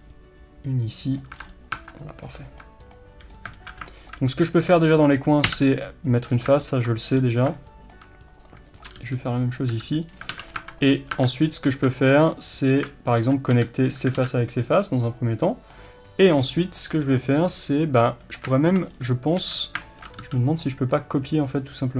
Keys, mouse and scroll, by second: 1.4-1.8 scroll down 1, 1.8 Tab, 2.0-4.5 middle drag, 2.4 scroll up 1, 3.4 scroll up 1, 3.6 alt+a, 4.5 click, 5.6 f, 6.3 scroll down 1, 6.7-8.4 shift+middle drag, 7.2-7.6 scroll up 2, 8.4 click, 9.0 g, 10.1-10.6 scroll down 2, 10.3 alt+a, 10.6 Tab, 11.1 scroll down 1, 11.2 Tab, 11.4 scroll up 1, 11.7 alt+a, 12.7 click, 13.6 f, 14.0-14.5 scroll down 2, 14.2 alt+a, 14.5-21.9 middle drag, 15.9-16.3 scroll up 1, 18.9-19.5 scroll up 1, 19.5 3, 20.7 c.